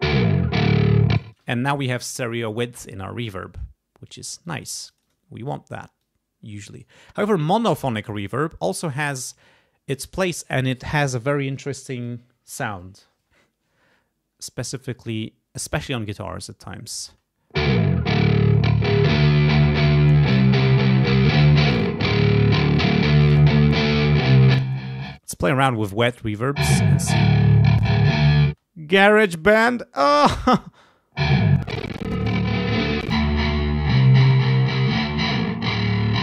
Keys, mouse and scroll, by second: 1.2 space, 4.4 click, 4.8 click, 6.0 click, 6.7 right click, 8.1 click, 16.2 click, 17.0 space, 18.4-19.8 drag, 20.3 click, 21.7 click, 22.4 click, 23.2 click, 24.5 click, 25.1 space, 25.3 click, 26.0 space, 27.8 click, 28.4 space, 30.6 space, 31.5 click, 33.0 click, 34.2 click.